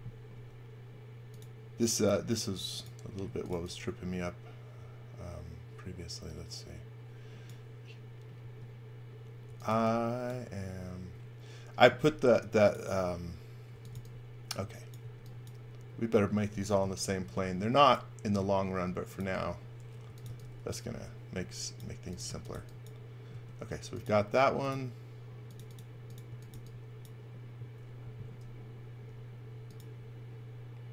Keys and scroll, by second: 0.3 m, 3.0-4.0 typing, 8.4-10.5 typing, 13.5-15.0 typing, 16.8 m, 19.8-20.8 typing, 21.9-23.3 typing, 26.0-27.0 typing, 29.1 r.